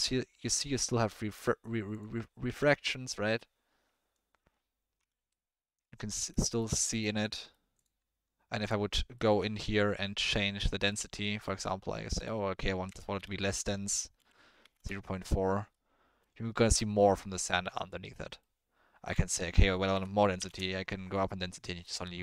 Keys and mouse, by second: 0.5-2.5 drag, 2.5 g, 5.3-6.3 drag, 6.4 shift+drag, 7.2 click, 7.3 middle click, 9.1 middle click, 10.2 middle click, 10.9 middle click, 11.4 middle click, 12.3-14.7 drag, 15.7-16.2 middle drag, 18.1-18.4 middle drag, 19.0-20.4 drag, 21.4-21.9 middle drag.